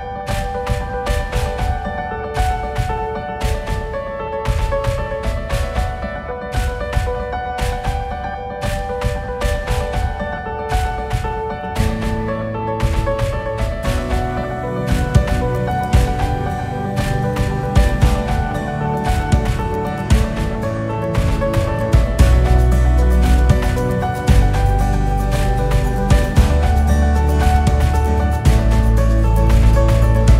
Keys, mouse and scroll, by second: 0.0-1.5 drag, 1.9 e, 6.0 s, 6.6 s, 7.9-9.4 drag, 13.7 e, 16.0 s, 17.0 click, 17.5 e, 18.8 s, 20.5-21.2 drag, 21.2-22.5 KP_6, 23.2-23.9 drag, 23.9 e, 26.5 s, 28.6 click, 29.2 e.